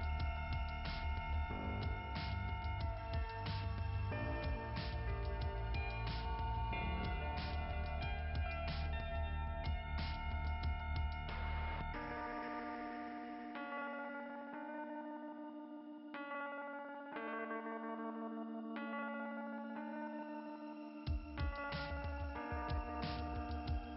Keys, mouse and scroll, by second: 0.6 scroll up 2, 2.2 click, 3.0 scroll down 2, 6.8 click, 9.2 l, 10.2 p, 10.6 Return, 11.6 Return, 13.0 click, 14.7 click, 15.7 click, 17.9 click, 19.0-19.5 scroll up 2.